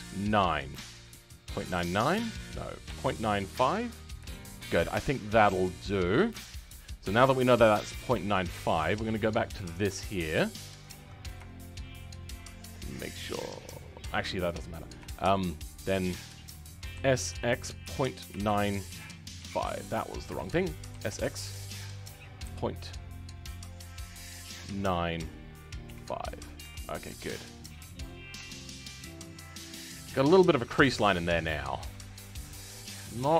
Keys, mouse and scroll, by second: 4.5-6.8 middle drag, 6.8-7.2 scroll down 2, 7.2-9.2 shift+middle drag, 9.2-10.7 scroll up 2, 10.7 alt+click, 11.4-14.1 shift+middle drag, 14.1-14.4 scroll down 2, 14.4-15.5 middle drag, 15.5 scroll up 2, 15.7-16.9 middle drag, 16.9 s, 28.1 scroll down 2, 28.3 Tab, 28.5-29.6 middle drag, 29.6-30.0 scroll up 5, 30.0-31.7 middle drag, 31.7 Tab, 32.0-32.3 scroll up 2, 32.3-33.3 middle drag.